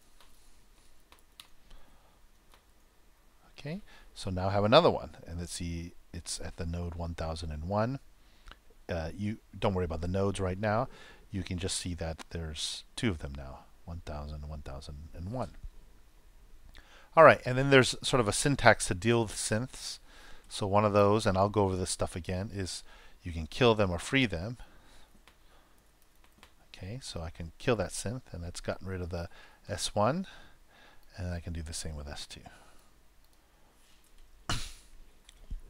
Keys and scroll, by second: 0.0-0.5 typing, 1.7 shift+t, 2.2 shift+0, 2.6 shift+;, 3.1 shift+super+;, 3.3 super+Return, 23.6 shift+`, 24.5 shift+s, 27.1 super+;, 32.7 super+c, 34.4 super+Return, 34.6 super+v.